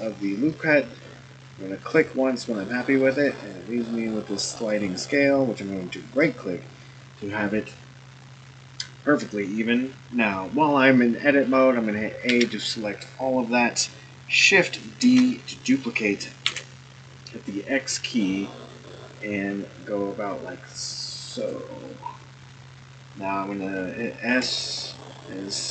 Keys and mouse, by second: 12.3 a, 15.0 shift+d, 24.3 s.